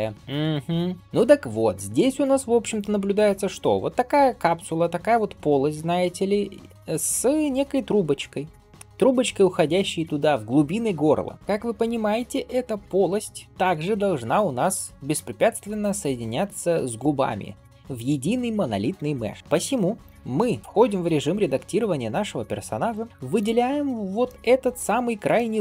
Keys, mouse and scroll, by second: 11.3 middle click, 11.3 scroll down 1, 15.8-17.0 scroll up 2, 17.1-17.7 scroll down 2, 19.2 scroll up 2, 19.6-20.1 scroll down 1, 20.4 scroll down 1, 20.6-21.0 scroll up 1, 21.0 Tab, 21.6 scroll up 2, 22.4 scroll up 2, 22.8 middle click, 23.1 scroll up 1, 23.2 alt+click, 23.8 scroll down 1, 24.1 middle click, 24.9-25.2 scroll up 2, 25.2 middle click.